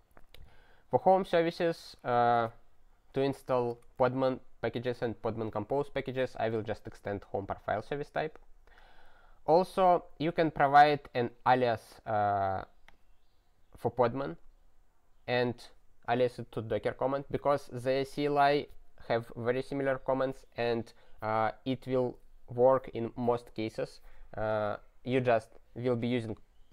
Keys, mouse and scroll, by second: 1.5 click, 1.6 click, 1.7 ctrl+a, 2.3 ctrl+alt+@, 3.7 ctrl+g, 6.9 click, 10.4 click, 11.9 click, 12.9 click.